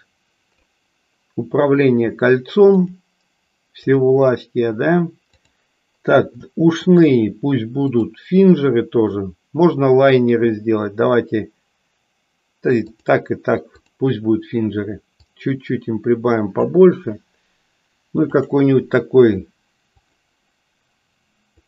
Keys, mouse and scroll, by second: 5.5 click, 7.8-13.1 drag, 13.8 click, 15.2-16.6 drag, 20.0-21.6 drag.